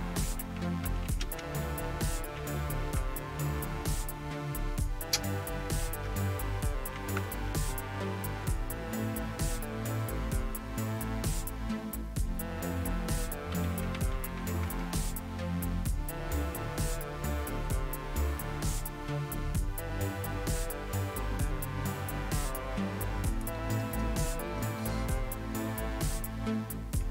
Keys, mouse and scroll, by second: 0.0-2.8 typing, 5.5 Up, 6.1 BackSpace, 6.9 h, 7.1 Return, 9.1-12.0 scroll up 2, 12.0-12.7 scroll down 3, 13.3-14.9 typing.